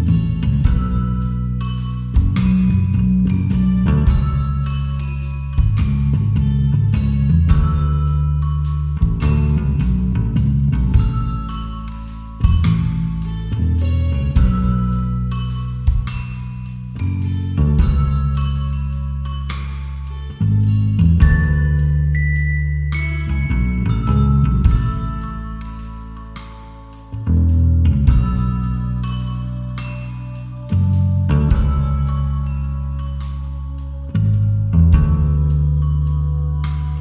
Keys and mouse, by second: 0.8 click, 3.8-4.8 drag, 5.6-6.6 drag, 8.1 shift+a, 10.2-15.5 typing, 11.2 KP_Enter, 13.4 KP_Enter, 16.6 KP_Enter, 17.8 KP_Decimal, 20.3 ctrl+a, 21.5 Tab, 22.4 3, 24.5 shift+click, 25.3 Delete, 28.1 ctrl+r, 29.8 KP_Enter, 32.1 Tab, 33.4-34.9 drag, 34.9 Tab, 36.1 click.